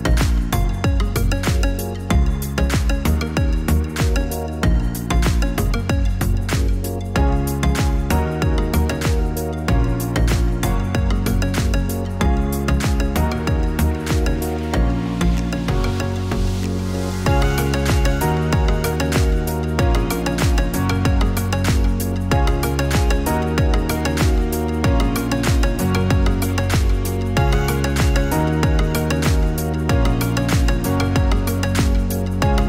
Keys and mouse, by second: 1.0 click, 6.2-7.8 drag, 10.1-15.2 drag, 11.7 BackSpace, 11.9 BackSpace, 12.4 BackSpace, 16.5-23.4 drag, 24.7-28.5 drag, 31.5 click.